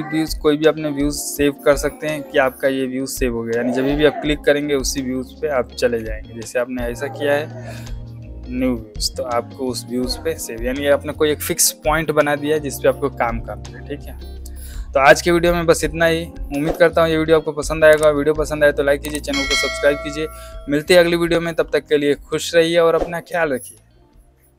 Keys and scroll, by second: 5.7 alt+z.